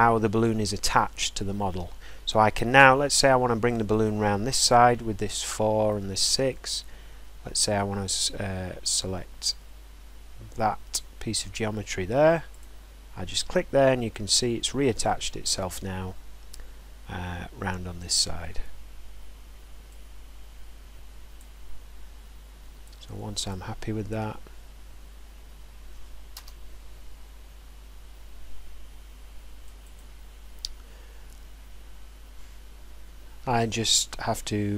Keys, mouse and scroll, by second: 12.6 click, 15.5 click, 15.6 click, 15.8 click, 16.2-17.0 drag, 17.1-17.6 drag, 21.4 drag, 23.5 click, 26.3 Return, 29.7 click, 29.7 right click.